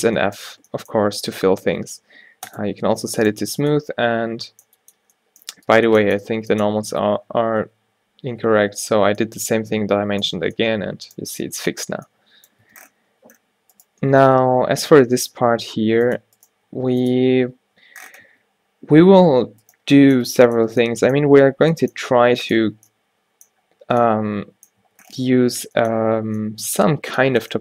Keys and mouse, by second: 0.5 Tab, 6.4 Tab, 6.8 a, 7.0 a, 7.7 ctrl+n, 8.7 Tab, 10.5 a, 12.7 Tab, 14.3 g, 15.9 click, 16.1 click, 16.5 click, 16.6 g, 17.3 Tab, 18.4 Tab, 20.2 click, 20.3 Tab, 20.8 Tab, 21.7 e, 22.9 Tab, 24.9 Tab.